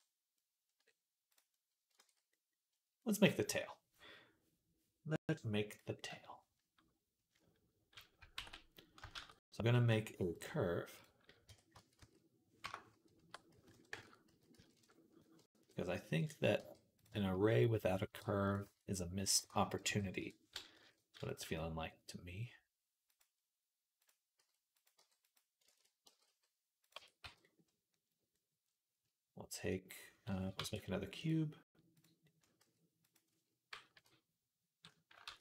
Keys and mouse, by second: 1.1 middle click, 1.1-16.0 right drag, 1.9 ctrl+s, 8.3 ctrl+s, 9.0 shift+a, 11.3 Tab, 11.6 a, 11.8 s, 13.0 r, 14.1 s, 15.5 KP_3, 16.4 g, 16.9 shift+right click, 17.1 shift+click, 18.0 g, 19.7 s, 20.6 s, 21.2 g, 23.4-30.2 right drag, 23.4 s, 23.4 g, 23.9 click, 24.2 s, 24.8 g, 25.6 ctrl+z, 25.9 g, 26.8 Tab, 27.1 z, 30.4 shift+a, 32.4 s, 33.8 KP_3, 35.1 ctrl+a.